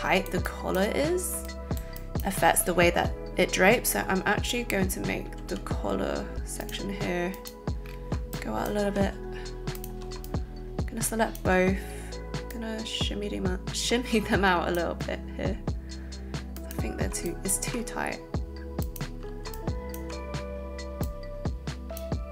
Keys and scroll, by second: 5.5 z.